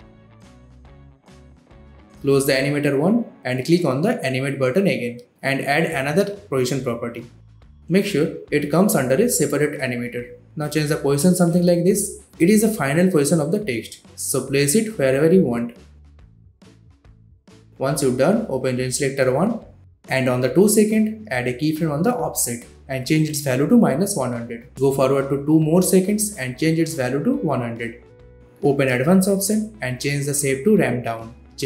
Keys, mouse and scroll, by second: 1.6-2.5 scroll up 1, 2.5 click, 5.3 click, 9.4-11.3 drag, 14.7-15.6 click, 21.9-23.1 typing, 24.4 click, 25.7-26.9 typing, 28.4 click, 28.9-29.6 scroll down 1, 29.6-31.6 drag.